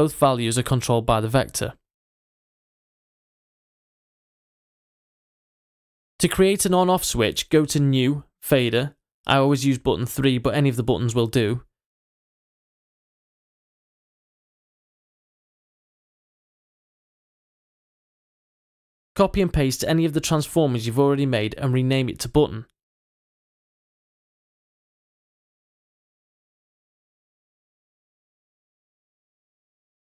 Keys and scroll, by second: 20.8 super+c, 23.9 super+v.